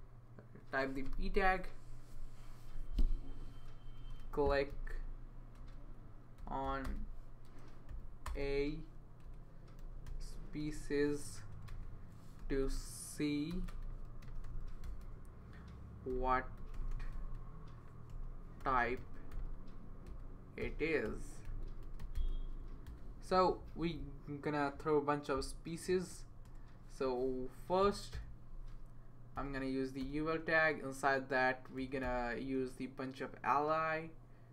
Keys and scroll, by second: 3.7-11.1 typing, 11.5 Return, 11.7 Return, 12.1-23.4 typing, 26.1 Return, 26.4 Return, 27.8-28.1 typing, 30.0 Return, 31.5-32.5 typing.